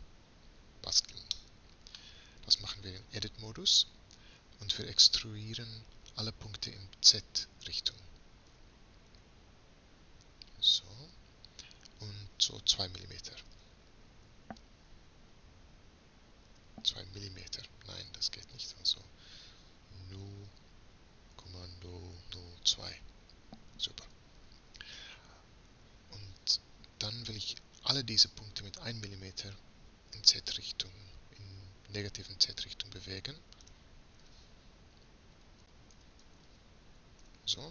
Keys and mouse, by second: 0.9-5.9 drag, 2.7 Tab, 8.5 e, 25.7 a, 26.3 a, 33.7 g.